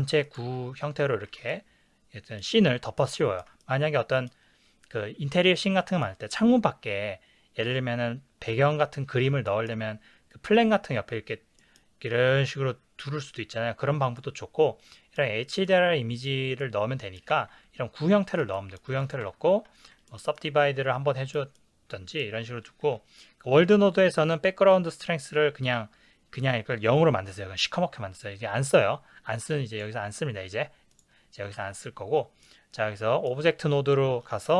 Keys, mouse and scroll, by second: 0.3 click, 0.5 Tab, 1.5-19.1 ctrl+middle drag, 19.1 click, 19.2 Tab, 20.1-33.7 ctrl+middle drag, 34.4 click.